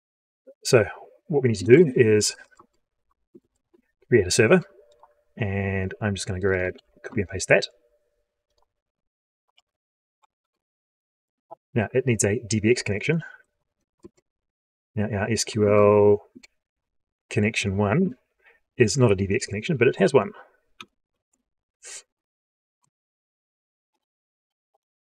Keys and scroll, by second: 6.6 ctrl+c, 9.4 ctrl+v, 13.9 ctrl+space.